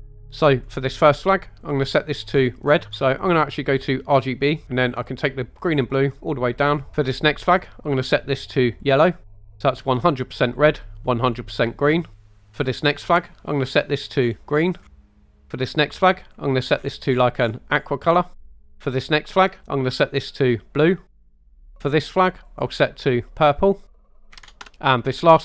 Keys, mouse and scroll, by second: 0.5 click, 6.9 ctrl+z, 7.4 click, 12.6 click, 15.6 click, 19.3 click, 21.8 click, 25.1 click.